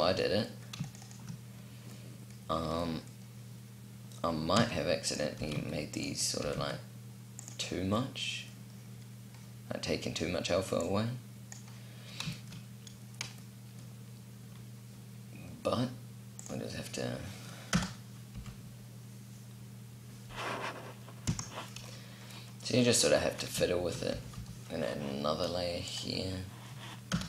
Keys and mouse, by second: 4.2 s, 5.0 g, 6.0 g, 8.5 middle click, 16.0-17.3 middle drag, 17.3 KP_0, 17.5 middle click, 18.0 p, 20.9 p, 23.4 shift+d, 25.6-26.6 drag, 26.7 KP_0.